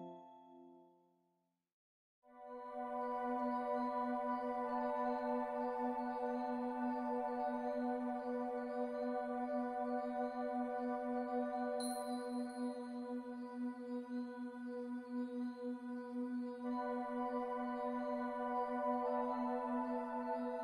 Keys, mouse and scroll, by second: 0.2 click, 2.3 f, 4.2 click, 6.9-7.2 scroll down 1, 7.3 alt+middle click, 9.3 right click, 11.5 click, 12.7 c, 19.7 click.